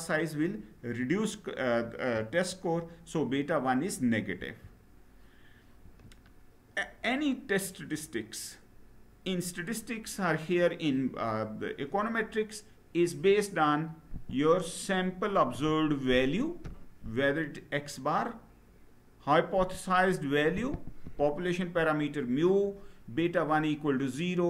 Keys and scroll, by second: 4.0 Down.